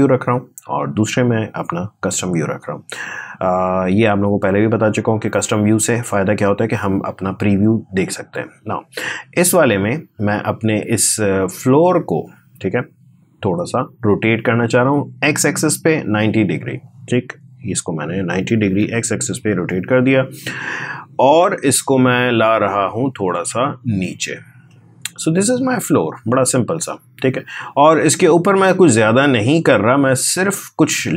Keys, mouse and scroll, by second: 4.7-5.2 scroll down 1, 7.0-7.4 scroll up 1, 7.8-9.4 scroll down 1, 12.6 click, 16.2 click, 18.5 9, 19.3 Return, 22.1 click, 23.2-24.5 scroll up 1, 24.5-26.3 drag, 26.3-28.0 scroll down 1, 28.0 click, 28.6 right click, 29.3 click.